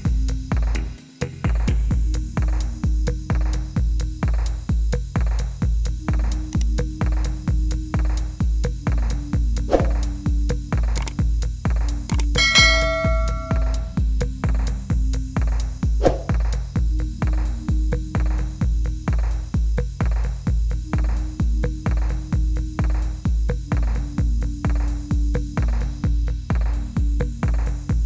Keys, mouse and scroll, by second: 0.5 click, 0.9 click, 1.2 click, 1.3 click, 1.5 click, 1.7 click, 1.9 click, 2.3 click, 2.4 click, 2.7 click, 3.1 click, 3.3 click, 3.7 shift+d, 4.0 click, 4.1 click, 4.4 click, 4.7 shift+d, 5.0 click, 5.2 click, 5.5 d, 5.5 click, 6.1 click, 7.1 click, 7.3 d, 7.7 click, 7.9 click, 8.5 click, 9.1 click, 9.3 click, 9.7 middle click, 10.5 click, 10.8 click, 12.0 click, 12.3 click, 12.5 middle click, 12.5 middle click, 13.1 click, 13.7 click, 14.3 d, 14.7 click, 15.3 click, 16.1 click, 16.5 click, 16.6 click, 17.1 click, 17.3 click, 17.6 click, 17.7 click, 18.1 click, 18.3 click, 18.5-20.5 typing, 18.7 click, 19.1 click, 19.6 click, 19.9 click, 20.3 click, 21.0 click, 21.5 click, 21.8 shift+d, 21.8 click, 22.3 click, 22.5 d, 23.1 click, 23.8 click, 23.9 d, 24.5 click, 24.7 d, 25.0 click, 26.1 Delete, 26.1 right click, 26.8 click, 27.0 click, 27.1 middle click, 27.8 click, 27.9 click.